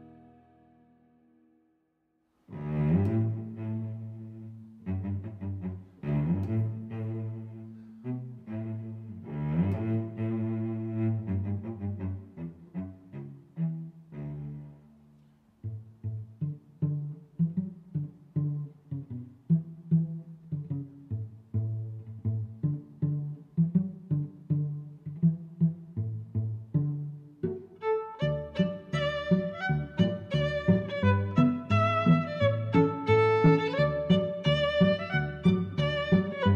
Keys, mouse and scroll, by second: 0.7 middle click, 1.8 g, 2.3 y, 3.7 click, 4.2 middle click, 5.1 click, 6.6 middle click, 7.3 g, 7.5 y, 8.4 click, 8.8 click, 11.1 middle click, 11.8 g, 12.2 z, 16.1 click, 16.8 middle click, 18.4 shift+super+Tab, 18.4 click, 18.7 d, 19.1 Return, 19.7 z, 20.2 click, 20.9 d, 21.1 Return, 21.4 Tab, 22.3 r, 22.6 z, 22.7 9, 22.8 0, 23.1 Return, 24.0 middle click, 25.2 click, 26.3 click, 26.6 middle click, 27.9 middle click, 28.5 g, 28.7 y, 29.2 x, 29.9 click, 30.5 click, 31.4 g, 31.7 x, 32.5 click, 32.7 middle click, 33.3 click, 34.0 middle click, 34.3 middle click, 34.9 g, 35.1 y.